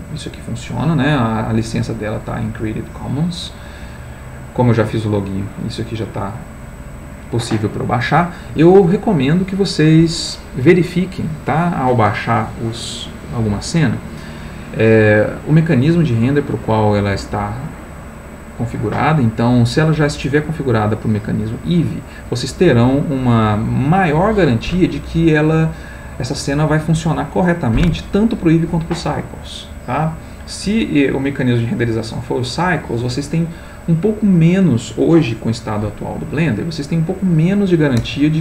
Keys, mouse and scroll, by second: 2.2-3.2 drag, 15.6 click, 20.4-21.7 drag.